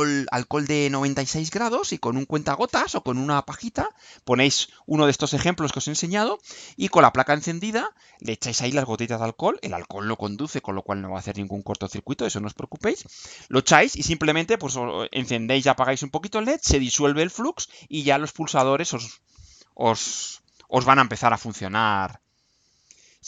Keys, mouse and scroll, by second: 1.1 click.